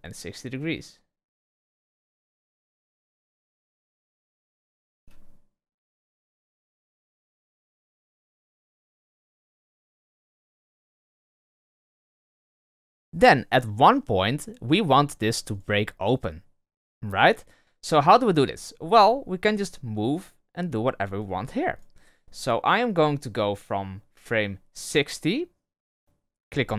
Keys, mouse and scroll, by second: 4.9 space, 10.3 space, 15.5 right click, 19.0 r, 23.3-26.0 drag.